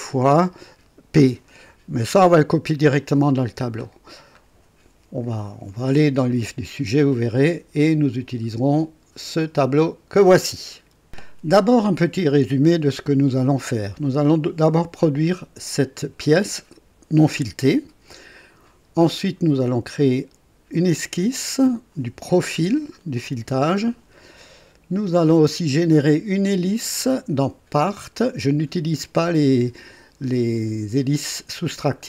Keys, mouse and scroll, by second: 3.9-4.2 scroll down 2, 7.2 scroll down 2, 7.9 scroll up 2, 25.0-25.6 scroll down 2, 26.4 click, 27.8 space.